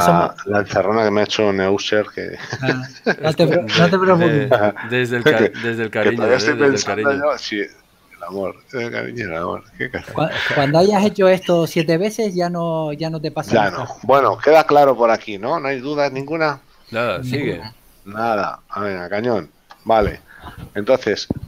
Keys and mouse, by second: 3.4 KP_7, 10.5 click, 12.4 click, 18.9 KP_Decimal.